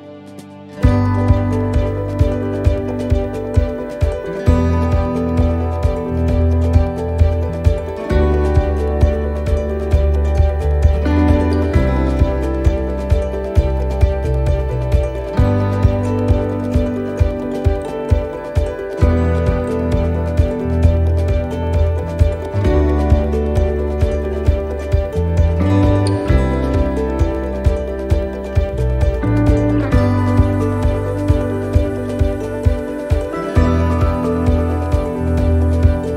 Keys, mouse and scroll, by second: 1.8 click, 5.2 right click, 6.2 shift+right click, 7.2 click, 11.0 right click, 11.5 shift+right click, 12.2 right click, 14.0 shift+right click, 15.1 click, 15.9 shift+middle click, 17.0-17.6 scroll down 4, 18.3 click, 21.2 shift+middle click, 21.6 scroll up 3, 22.2 scroll up 1, 22.4 shift+middle click, 23.8 middle click, 24.8 right click, 25.3 shift+right click, 26.3 click, 28.9 middle click, 29.5 shift+middle click, 30.1 scroll up 2, 30.5 middle click, 30.7-31.5 scroll down 3, 31.6 right click, 31.6 scroll down 1, 32.5 shift+right click, 33.3 click, 34.2 shift+middle click, 35.3 click.